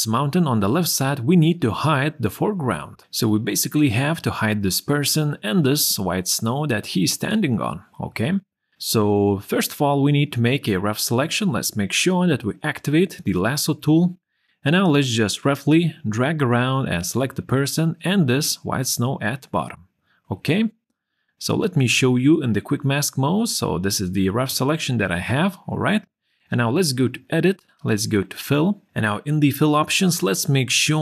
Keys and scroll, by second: 21.9 q.